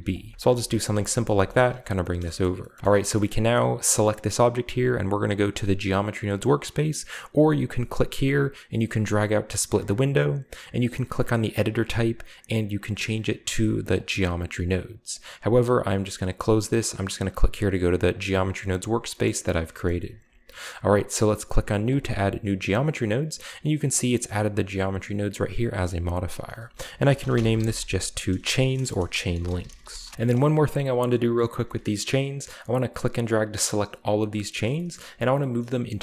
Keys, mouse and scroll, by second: 0.0-2.1 typing, 0.2 click, 0.4 click, 1.0 Tab, 1.6-3.9 middle drag, 1.7-2.1 drag, 2.1-2.8 scroll up 1, 3.7 right drag, 8.5-9.9 drag, 10.8 click, 13.9 drag, 16.4 click, 18.1 click, 19.2-20.4 scroll up 2, 19.9 shift+middle click, 21.8 click, 23.9 click, 26.4 click, 27.1-30.4 typing, 30.1-32.1 shift+scroll up 2, 31.8-32.7 shift+middle drag, 32.7-33.9 drag, 34.6 shift+middle drag, 34.7-35.5 shift+scroll up 1, 35.0-35.4 middle drag, 35.6 middle click.